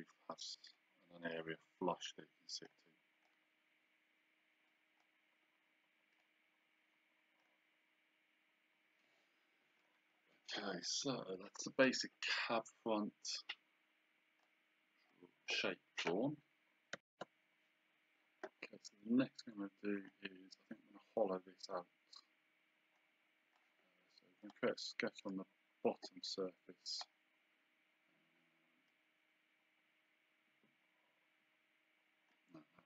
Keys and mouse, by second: 2.7 click, 4.7 click, 6.2 click, 7.4 click, 11.8 click, 15.1 click, 20.1 click, 24.4 click, 27.0 click, 28.9 click.